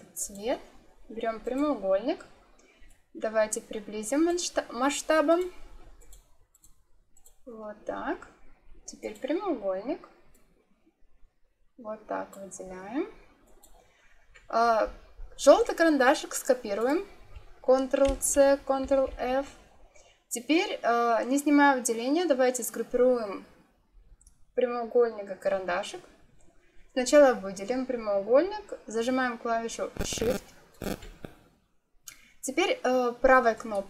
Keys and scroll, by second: 18.0 ctrl+c, 18.7 ctrl+f.